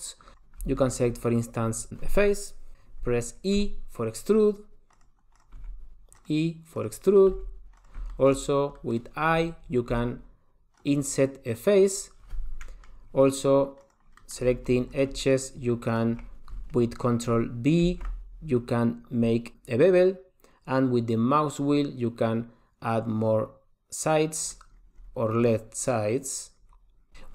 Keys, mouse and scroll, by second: 0.5 click, 1.0 shift+middle click, 1.3-2.9 scroll down 1, 3.8 e, 5.5 click, 5.8 e, 7.0 click, 7.3-8.2 scroll down 3, 7.5 e, 8.3 shift+middle click, 8.7-9.0 scroll up 3, 9.0 middle click, 10.1 i, 12.8 middle click, 13.1-14.0 scroll down 1, 14.0 click, 14.0 scroll down 1, 14.4 middle click, 15.1 click, 15.5 shift+click, 16.1 shift+click, 18.0 ctrl+b.